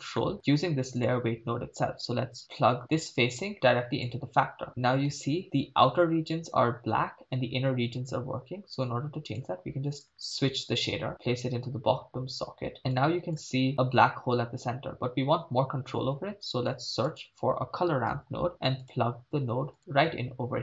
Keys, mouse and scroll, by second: 0.3 scroll down 2, 0.3 middle drag, 1.0 click, 2.9-4.4 drag, 9.4 click, 13.0 click, 16.2 shift+a.